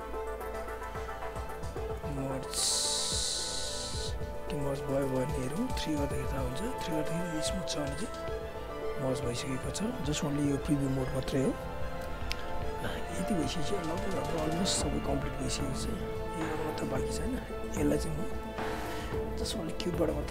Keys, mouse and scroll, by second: 1.0 shift+right click, 2.2 alt+click, 4.9 alt+middle click, 5.2 alt+right click, 5.5 alt+click, 6.1 3, 6.7 click, 11.0 1, 12.0-12.4 scroll up 1, 12.7 alt+click, 13.0 alt+right click, 13.3 alt+click, 17.0 alt+middle click, 17.2 alt+right click, 17.4 alt+click.